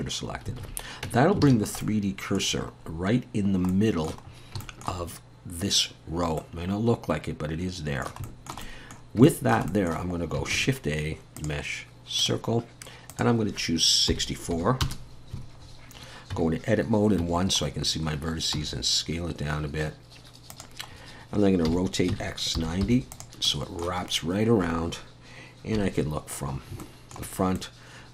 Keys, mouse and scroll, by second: 0.6 alt+a, 1.1 Tab, 1.5 alt+a, 1.6 scroll down 2, 1.8 middle click, 2.5-3.0 scroll down 4, 3.7 middle click, 3.7-4.1 scroll down 1, 4.3 scroll up 2, 4.6 shift+middle click, 6.4 middle click, 8.3 shift+middle click, 8.7 middle click, 9.3 shift+middle click, 10.5 shift+a, 13.1 click, 15.6-16.3 scroll down 1, 16.3 scroll down 3, 16.3 Tab, 17.2 1, 17.8-18.6 scroll down 2, 18.6 s, 20.9-21.6 scroll up 2, 21.7 r, 23.5 middle click, 24.0-24.7 scroll up 1, 24.7-25.1 scroll up 2, 25.8 KP_1, 26.5 scroll up 2, 26.8 shift+middle click, 27.6 middle click.